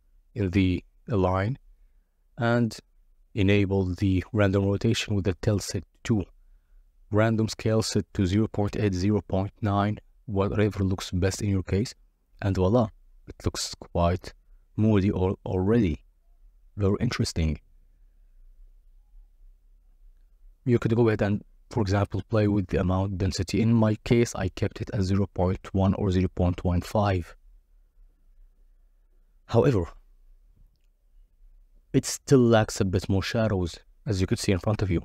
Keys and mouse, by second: 2.5-3.3 drag, 3.7-5.8 drag, 7.1 z, 8.7 click, 10.3 middle click, 11.3 middle click, 12.0-13.1 drag, 13.5 KP_0, 16.6 click, 17.9-19.2 drag, 20.0 click, 21.6-23.6 drag, 23.6 middle click, 24.5 click, 24.9 middle click, 25.1 middle click, 25.2 middle click, 26.7-27.8 drag, 27.8 middle click, 28.0 middle click, 28.2 click, 29.9 click, 30.7 click, 31.2 click, 31.7-32.2 drag.